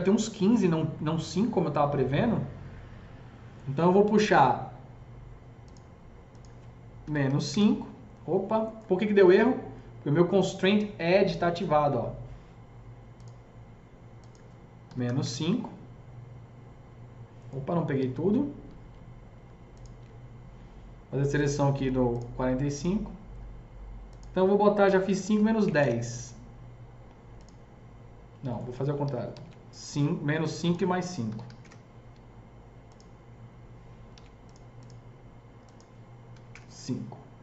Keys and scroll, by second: 7.0 KP_Subtract, 7.2 KP_5, 7.4 Return, 9.1 ctrl+z, 14.8 KP_Subtract, 15.1 Return, 15.1 KP_5, 17.8 ctrl+z, 25.0 KP_Subtract, 25.3 KP_1, 25.5 KP_0, 25.6 Return, 28.9 ctrl+z, 31.1 KP_Subtract, 31.3 KP_5, 31.5 Return, 34.0 ctrl+z, 36.2 KP_5, 36.3 Return.